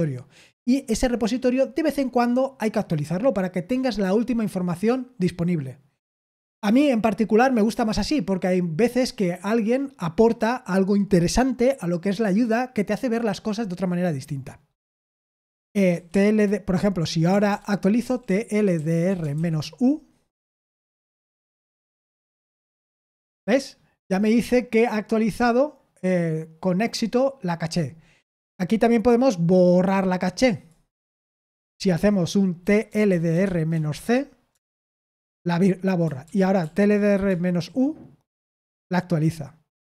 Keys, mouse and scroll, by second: 17.2-20.4 typing, 20.9 Return, 32.8-34.4 typing, 34.4 Return, 36.2 ctrl+p, 36.5 ctrl+p, 37.2 Return.